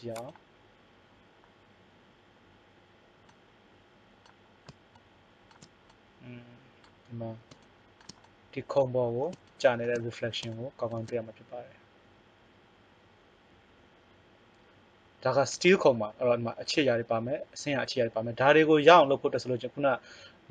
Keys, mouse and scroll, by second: 6.0 middle click, 10.5 middle click, 10.8-12.0 middle drag, 12.4-14.5 middle drag.